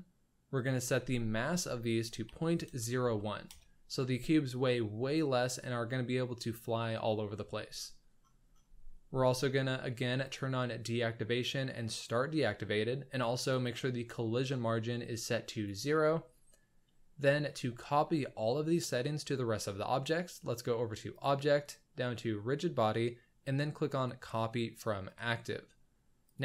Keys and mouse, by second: 0.7-3.5 drag, 12.0 click, 13.6 click, 15.3 click, 21.1-26.4 drag.